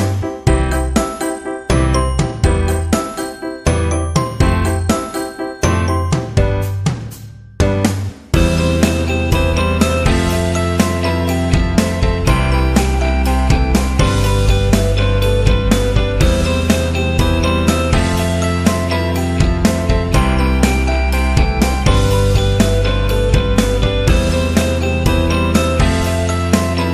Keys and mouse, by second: 5.4 middle click, 6.2 right click, 7.2 shift+right click, 7.7 shift+right click, 8.3 middle click, 12.2 Tab, 12.4 middle click, 13.0 KP_1, 13.9 KP_3, 14.7 Tab, 15.0 right click, 15.6 KP_1, 16.7 shift+middle click, 17.3 shift+a, 19.0 KP_3, 19.7 g, 21.0 KP_1, 22.1 ctrl+r, 23.9 middle click, 24.6 middle click.